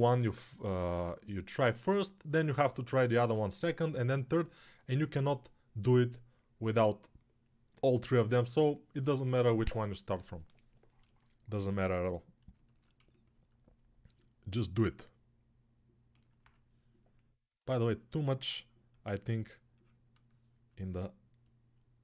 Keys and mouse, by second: 20.1-22.0 right drag.